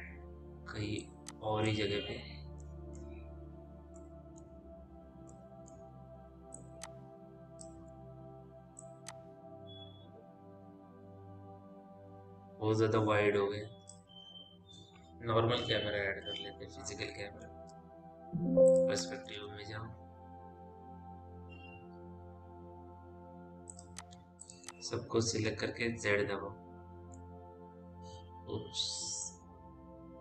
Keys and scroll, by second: 8.3 e, 16.6 Delete, 17.2 c, 19.2 p, 25.5 z.